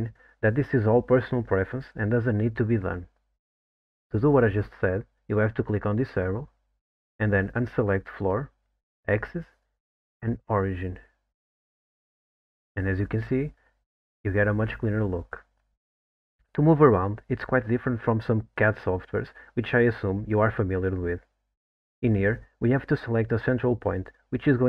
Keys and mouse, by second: 5.8-12.6 drag.